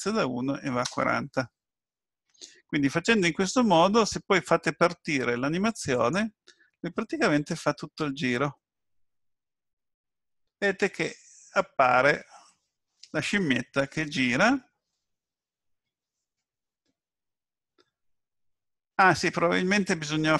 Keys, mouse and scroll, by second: 5.9 click, 8.6 middle click.